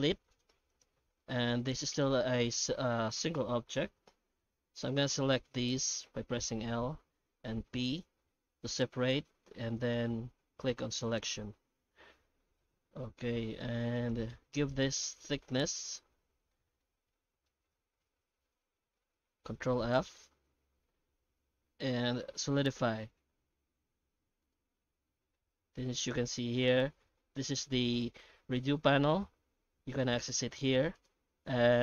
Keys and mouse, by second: 1.2 middle click, 1.8 alt+a, 5.6 l, 7.3 p, 10.8 Tab, 11.0 right click, 11.3 Tab, 12.1 Tab, 12.6-13.7 middle drag, 13.9 right click, 14.6 right click, 15.0 Tab, 15.4 middle click, 16.1 a, 16.5 middle click, 17.1 shift+middle click, 19.5 ctrl+f, 30.9 click.